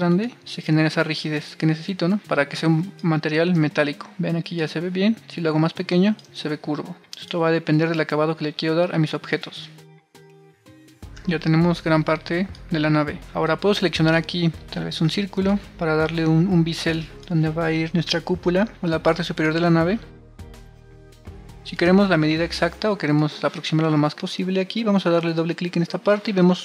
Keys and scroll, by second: 1.6 super+r, 3.2 super+r, 5.9 super+r, 6.7 super+z, 9.0 super+r, 11.2 super+r, 17.1 super+z.